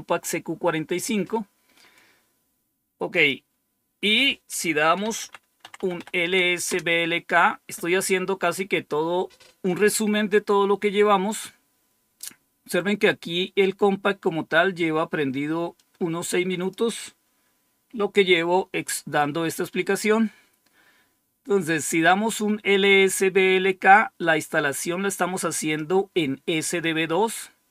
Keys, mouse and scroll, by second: 3.0 click, 4.7-6.4 typing, 6.6 Return, 15.6-16.6 drag, 23.8-25.7 drag, 27.6 click.